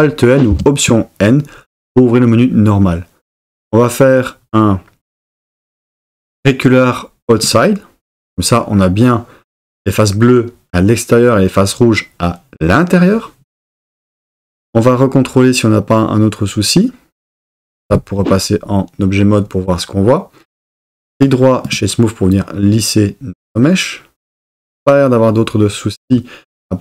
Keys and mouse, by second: 0.5 alt+n, 17.9 Tab, 21.1-21.7 right drag.